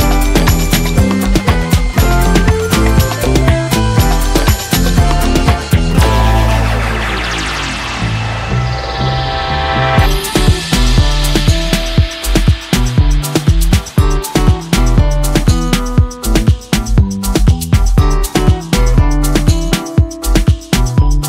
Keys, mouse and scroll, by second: 0.2-0.8 drag, 2.1 ctrl+z, 3.5 right click, 4.1 click, 4.6 click, 5.2 [, 5.7-6.4 drag, 14.6 scroll down 1, 16.4 click, 16.9 space, 17.8-19.1 ctrl+click, 19.8-20.9 typing.